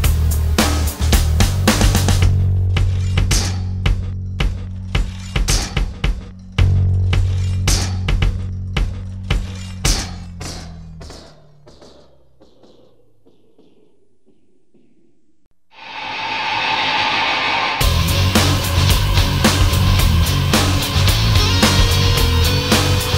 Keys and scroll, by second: 18.6 alt+space.